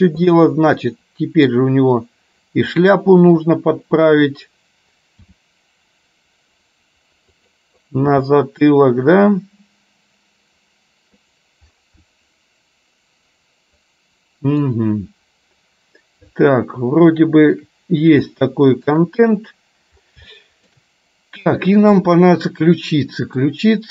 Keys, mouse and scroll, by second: 0.3 click, 0.9 middle click, 2.8 click, 3.3 KP_3, 5.4 r, 8.3 g, 12.2-14.7 middle drag, 17.3 shift+middle click, 17.7 scroll down 1, 18.4-19.0 scroll up 1, 20.4 shift+middle click, 21.5 click, 22.2-23.5 middle drag.